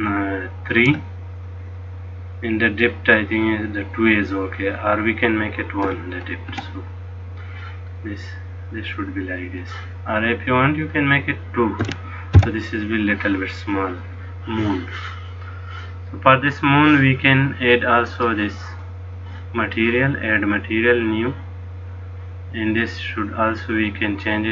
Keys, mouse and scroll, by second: 4.7 click, 8.2 middle click, 10.9 click, 18.2 click, 20.7 click, 23.5 click.